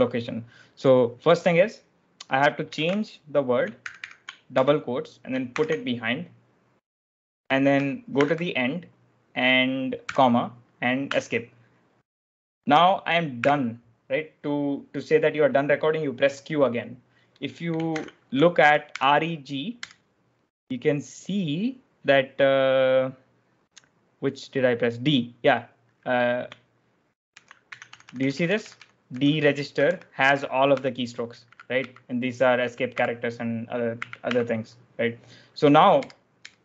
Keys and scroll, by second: 2.6-5.4 typing, 4.5 Escape, 8.1 shift+a, 9.9 ', 11.0 Escape, 13.3 q, 17.6-20.2 typing, 27.2 ctrl+j, 27.6 Escape, 27.8-34.6 typing, 35.9 Return, 36.3 Return.